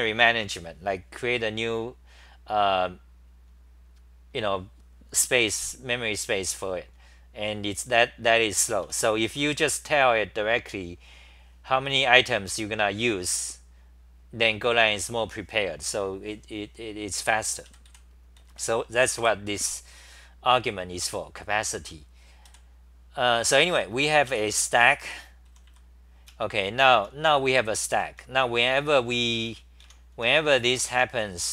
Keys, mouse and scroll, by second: 8.7-10.1 typing, 14.5 ctrl+g, 17.7-19.7 typing, 21.7 ctrl+g, 22.5 g, 24.0-31.5 typing.